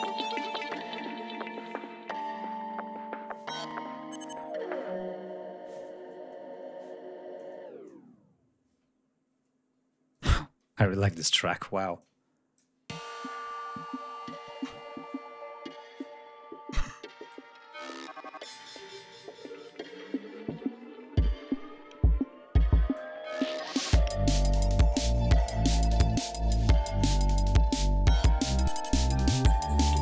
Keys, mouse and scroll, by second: 1.0 scroll down 2, 2.6 ctrl+scroll down 2, 2.8 ctrl+scroll up 2, 3.8 ctrl+scroll up 2, 5.4 ctrl+scroll down 2, 6.2-6.6 scroll down 2, 10.1 space, 10.9 ctrl+s, 11.9 click, 12.8 space, 13.1-13.9 scroll down 4, 14.3-14.6 scroll down 2, 14.9 scroll down 2, 16.3 ctrl+scroll down 1, 18.7-20.0 scroll up 4, 20.6-20.9 scroll up 2, 21.1 scroll down 2, 22.0 scroll down 2, 22.8 click, 24.2-24.5 scroll up 1, 25.7-26.0 ctrl+scroll up 1, 27.3 click, 29.4-29.7 scroll down 2.